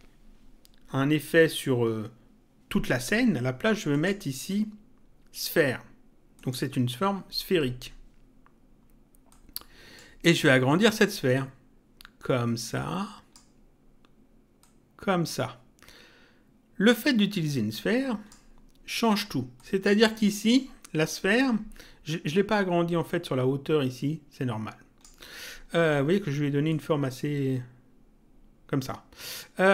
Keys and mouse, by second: 3.9 click, 6.3 click, 9.3 click, 11.3 click, 14.5 click, 19.5 click, 23.0 click, 26.6 click.